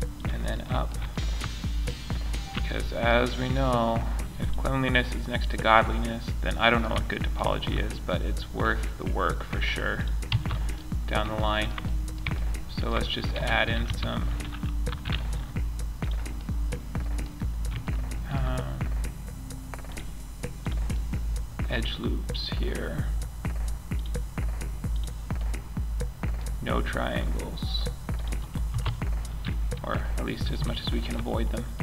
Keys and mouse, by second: 13.0 a, 13.2 a, 14.9 k, 20.3-21.6 middle drag, 29.0 middle click.